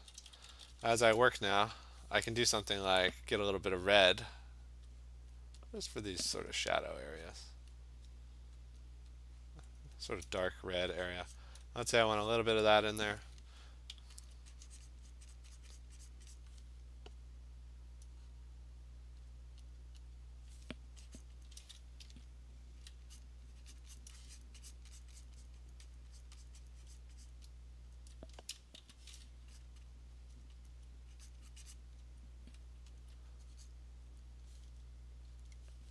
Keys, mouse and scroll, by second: 0.0-0.7 typing, 3.9 click, 5.3 click, 7.7 click, 8.8 click, 9.9 click, 10.1 Return, 11.1 click, 11.4 click, 12.3 click, 14.3 alt+click, 14.9 alt+click, 15.1 click, 15.3 click, 15.6 click, 15.8 click, 16.1 click, 16.4 click, 17.3 alt+click, 18.5 click, 19.3 click, 19.7 click, 20.1 click, 21.2 click, 21.5 click, 22.0-22.9 ], 23.2 click, 23.8 click, 24.0 click, 24.2 click, 24.4 click, 24.7 click, 25.0 click, 25.2 click, 25.5 click, 25.7 click, 25.9 click, 26.2 click, 26.5 click, 26.7 click, 27.0 click, 27.3 click, 28.0 alt+click, 28.8 b, 29.6 click, 29.8 click, 30.7 alt+click, 31.3 click, 31.7 click, 32.6 alt+click, 33.0 alt+click, 33.7 click, 35.4 click.